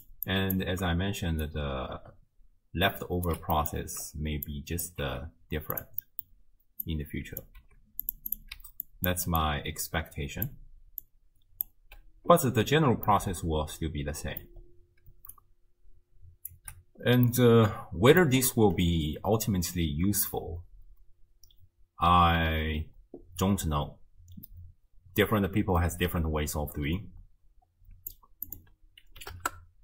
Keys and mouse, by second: 0.3 click, 1.3 d, 1.5-3.3 drag, 3.3 d, 3.7 click, 4.6-4.9 right drag, 5.1 g, 6.2 click, 6.9-7.5 right drag, 7.6 g, 8.3 right click, 8.6-11.9 d, 8.8 click, 11.0 click, 13.2-14.5 drag, 15.1 d, 15.4-16.5 drag, 16.5 d, 16.6 d, 17.4 click, 17.4 middle click, 17.4 right click, 20.4-28.1 drag, 28.6 click.